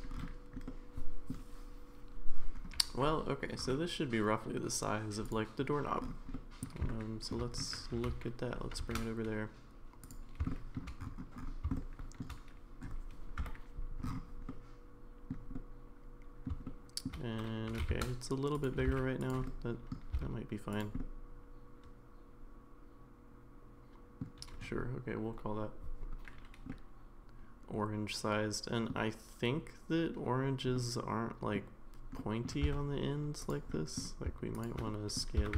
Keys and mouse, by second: 0.7-1.3 middle drag, 5.3 click, 6.3 middle click, 6.9 shift+middle click, 7.9 g, 10.5 middle drag, 11.8-12.2 shift+middle drag, 13.4 KP_Decimal, 14.5-15.3 middle drag, 15.5-16.4 middle drag, 16.7-17.1 shift+middle drag, 17.7 g, 18.8 g, 19.5 middle click, 20.1 s, 21.0-24.2 middle drag, 26.7-28.9 middle drag, 30.8-31.6 middle drag, 32.2 middle drag, 32.6 Tab, 33.7 middle click, 34.6 shift+click, 34.9 middle click, 35.4 s.